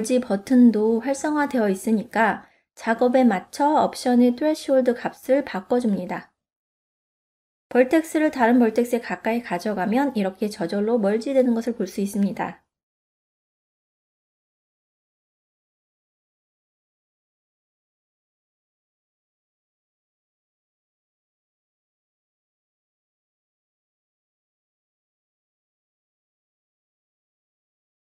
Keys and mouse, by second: 1.6-4.6 drag, 3.8 KP_0, 5.4 middle click, 6.1 click, 7.4-9.6 drag, 10.3 click, 10.7 click, 11.2 click, 11.8 middle click, 12.5 ctrl+middle click, 13.0 shift+middle click, 13.8 ctrl+middle click, 14.4 middle click, 15.5 f, 16.7 click, 18.2 click, 19.4 click, 20.1 f, 20.8 click, 21.2 middle click, 22.2 click, 22.6 click, 25.0 f, 26.1 click, 26.6 middle click, 27.4 middle click, 28.0-28.1 middle drag.